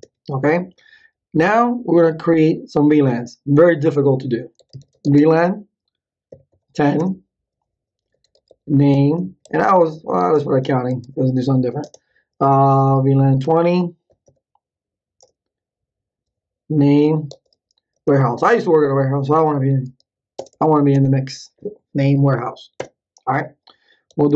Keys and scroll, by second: 4.3-11.5 typing, 11.8 Return, 12.6-14.8 typing, 15.2 Return, 16.5-21.8 typing, 22.8 Return, 23.8-24.3 typing.